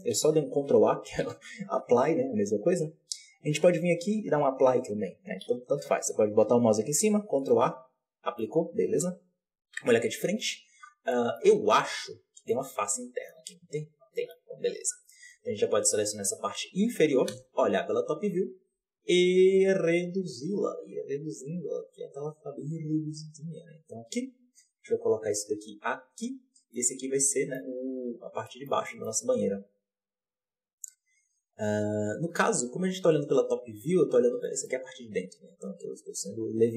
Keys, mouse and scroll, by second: 0.1 ctrl+z, 1.5 ctrl+a, 3.3-5.5 drag, 5.5 ctrl+z, 6.9 ctrl+a, 7.4-8.9 middle drag, 8.9 KP_7, 9.7 KP_1, 9.9 Tab, 11.0 middle click, 11.4 z, 11.9-12.4 scroll up 4, 12.4 middle click, 13.3-14.0 scroll up 1, 14.0 middle click, 14.3-14.9 scroll down 6, 14.9 KP_1, 15.1 z, 16.0-17.2 drag, 17.2 KP_7, 17.8-18.5 scroll up 1, 18.5 s, 26.6-27.7 middle drag, 27.7-28.4 scroll down 6, 28.4-31.9 shift+middle drag, 33.1 KP_7, 33.7-34.0 scroll up 3, 34.3 shift+middle click, 34.8-35.3 scroll up 1, 35.3 s.